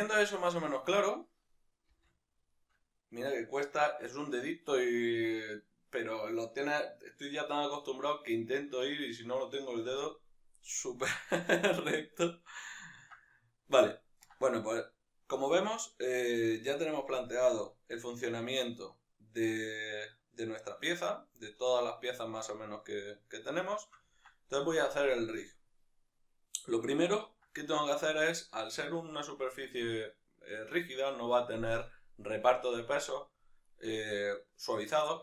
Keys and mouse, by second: 1.9 shift+c, 2.5 shift+middle click, 13.9 ctrl+right click, 18.8-28.2 middle drag, 28.2-35.2 right drag.